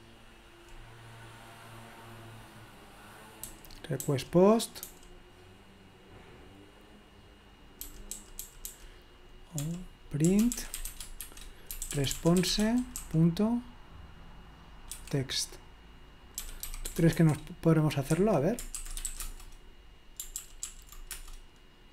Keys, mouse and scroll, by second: 3.5 j, 4.9 j, 7.8-13.5 typing, 15.0 typing, 16.1-19.6 typing, 18.2 Escape, 20.4 ctrl+p, 20.7 ctrl+p, 21.1 Return.